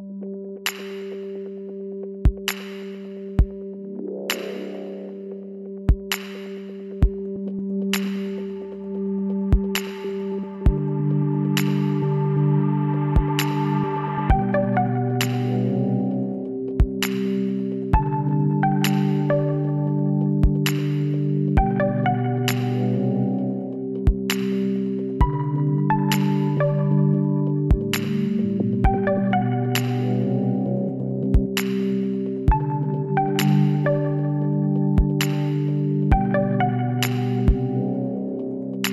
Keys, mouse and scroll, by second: 0.3 middle click, 0.9-2.0 drag, 2.0-4.6 middle drag, 4.6 w, 10.7 middle click, 11.4 Tab, 12.6 middle click, 14.5-16.2 middle drag, 16.2 KP_1, 24.9-27.1 middle drag, 27.1 KP_3, 28.2 z, 29.2 Tab, 30.8 l, 36.0 Tab, 37.7 shift+s.